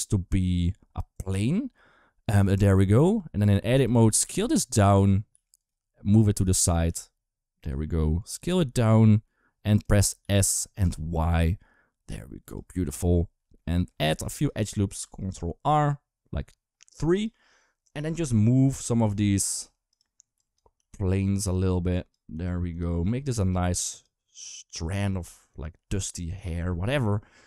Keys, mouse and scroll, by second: 2.6 middle click, 3.3 middle click, 3.5 Tab, 3.8 a, 4.0 s, 5.1 s, 5.9 g, 6.6 s, 7.6 middle click, 8.2 s, 10.0 s, 13.5 middle click, 14.1 shift+middle click, 14.8 ctrl+r, 18.0 1, 18.3 click, 18.8 g, 19.4 r, 20.2 click, 20.5 g, 21.7 click, 22.1 g, 22.9 click, 23.1 g, 24.2 click, 24.8 e, 25.5 r, 26.3 s.